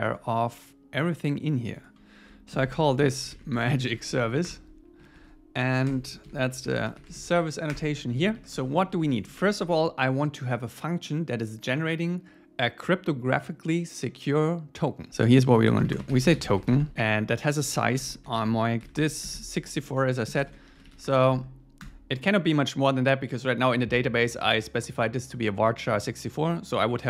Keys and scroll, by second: 4.5 Return, 5.0 super+1, 5.6 Up, 5.9 Return, 6.2 alt+l, 7.7 Return, 8.1 Down, 8.4 Return, 9.2 Up, 9.5 Down, 19.7 Right, 21.3 alt+8, 21.8 Return.